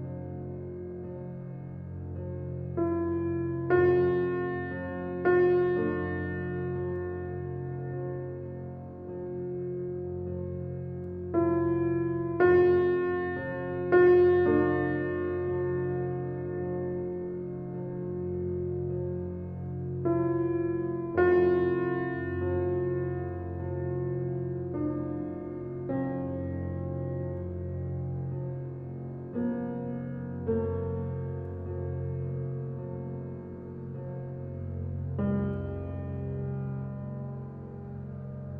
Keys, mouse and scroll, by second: 0.2-0.5 right drag, 0.5 Tab, 1.7 a, 3.0 ctrl+b, 5.3 click, 6.7-10.1 drag, 10.1 scroll down 1, 10.2-12.5 middle drag, 12.5 ctrl+b, 14.9 Tab, 15.3-16.1 scroll down 5, 16.1 click, 16.7 click, 18.6 click, 23.0 click, 23.6 click, 28.3 click, 35.5 click.